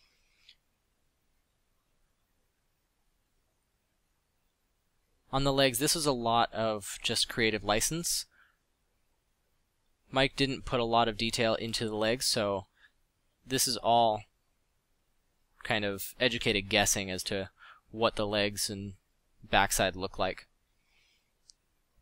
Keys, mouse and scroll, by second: 7.8 f, 12.5 middle drag, 13.8 f, 16.4 f, 17.3 f, 18.3 f.